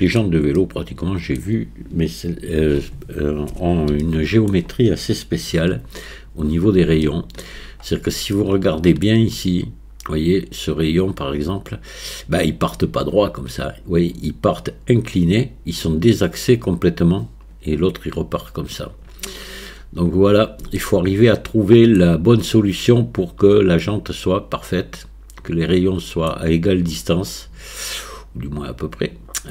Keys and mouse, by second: 0.6 middle click, 4.1-4.5 shift+middle drag, 5.5 KP_1, 7.1-7.4 shift+middle drag, 8.4-9.1 shift+middle drag, 20.9-22.0 shift+middle drag, 22.0 middle click, 22.5-26.3 middle drag, 27.3-29.5 middle drag.